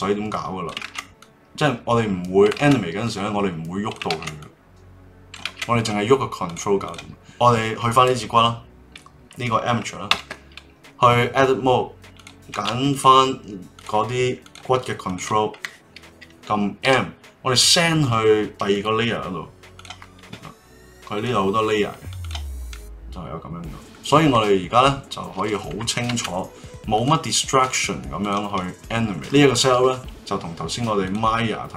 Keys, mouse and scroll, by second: 0.8 ctrl+z, 1.2-2.6 drag, 2.6 ctrl+z, 3.0-4.1 drag, 4.1 ctrl+z, 4.4-5.4 drag, 5.4 ctrl+z, 5.7 click, 6.4 click, 6.8 click, 10.1 Tab, 12.1 click, 12.9 shift+click, 13.7 shift+click, 14.4 shift+click, 15.0 shift+click, 16.8 m, 19.7 click, 21.1 click, 22.2 click, 22.7-25.7 middle drag, 26.0 ctrl+Tab, 27.7 click, 28.2 click, 28.6-29.1 middle drag, 29.1 g.